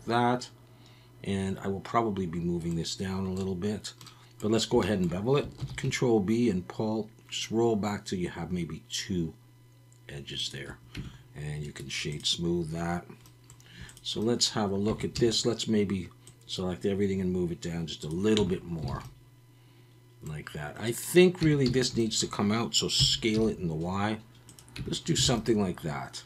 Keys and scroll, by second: 5.6 ctrl+b, 10.9 Tab, 14.9 Tab, 15.1 a, 18.4 Tab, 18.9 alt+a, 21.4 Tab, 21.7 a, 23.0 s, 23.3 y, 24.8 Tab, 25.2 alt+a.